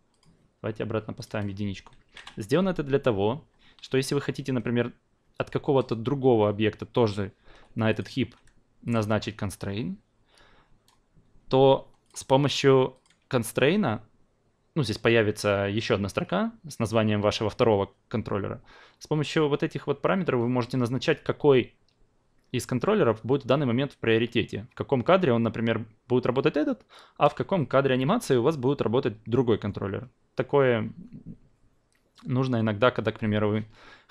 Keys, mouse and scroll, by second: 0.1 click, 1.2 click, 7.5 q, 7.9-8.9 drag, 12.0 click, 12.9 click.